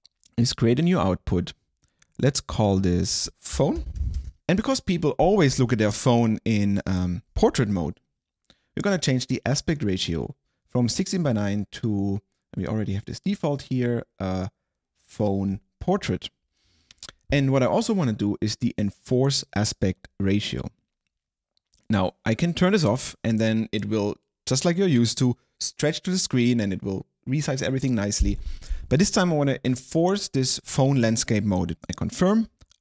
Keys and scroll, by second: 3.4-4.8 typing.